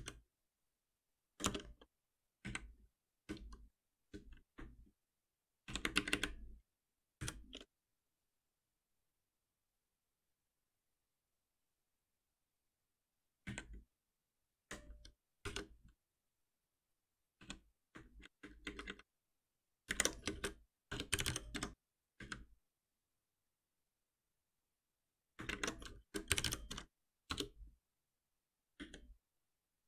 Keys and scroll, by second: 1.4 Return, 7.2 ctrl+alt+v, 19.9 ctrl+shift+Left, 25.5 ctrl+shift+Right.